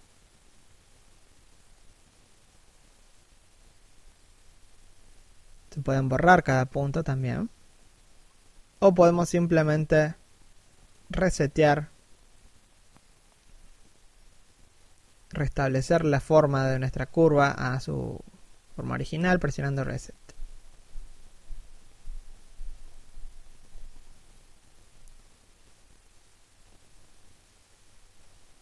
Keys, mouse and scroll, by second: 0.7 middle click, 2.3 3, 2.6 1, 10.5 click, 11.8 f, 12.3 click, 18.2 f, 21.8 right click, 22.5 f, 23.1 click, 24.7 click, 27.1 middle click.